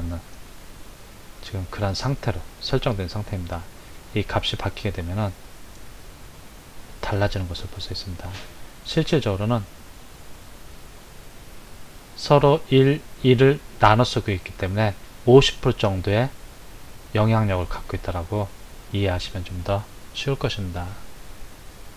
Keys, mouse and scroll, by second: 4.0-7.2 drag.